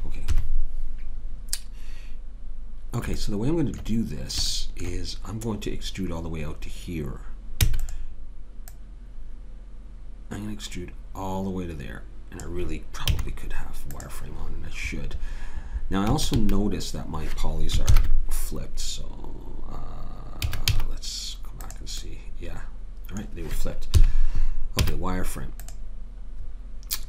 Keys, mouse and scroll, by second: 0.3 KP_3, 7.7 e, 8.7 click, 13.1 z, 16.1 a, 16.3 a, 17.9 ctrl+n, 20.5 a, 20.7 z, 24.0 KP_3, 24.8 z.